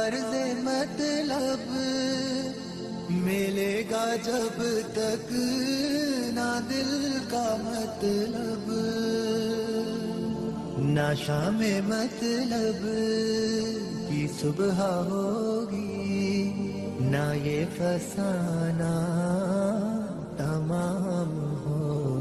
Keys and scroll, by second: 4.2 g, 5.2 ctrl+g, 8.7 F2, 15.0 Escape, 19.2 F4.